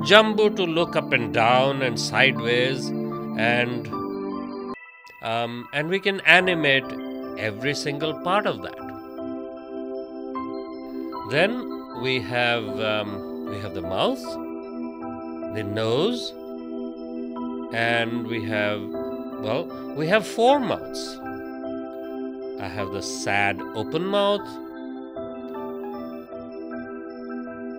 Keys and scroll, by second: 6.9 ctrl+z, 10.0 space, 14.7 space.